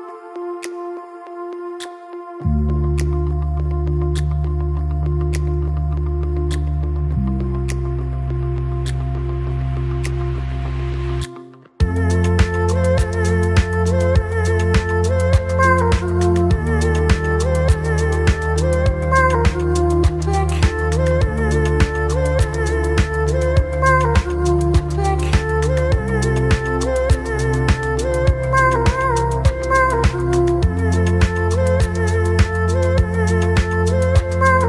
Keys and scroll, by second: 1.6 F4, 3.0 F4, 5.7 ctrl+r, 5.9 ctrl+c, 6.9-8.1 typing, 8.9 F3, 10.4 F3, 11.6 1, 12.1 F4, 13.5 F3, 14.0 alt+F4, 15.3 alt+F4, 17.0 2, 17.7 ctrl+r, 18.1 ctrl+c, 22.1 ctrl+r, 22.3 ctrl+c, 28.3 1, 29.5 ctrl+shift+e, 30.2 ctrl+shift+e, 30.6 2, 31.0 ctrl+r, 31.2 ctrl+c.